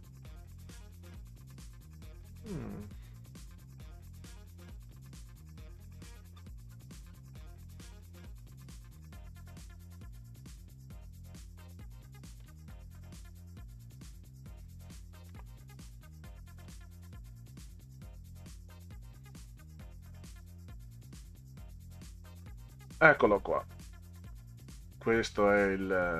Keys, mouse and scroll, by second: 4.0 middle click, 4.8 middle click, 6.3-7.1 scroll down 6, 8.0 click, 9.0-10.2 drag, 10.4 Delete, 12.4 click, 15.0 click, 16.7 Delete, 17.9 click, 21.1 click, 22.6-23.3 scroll up 4.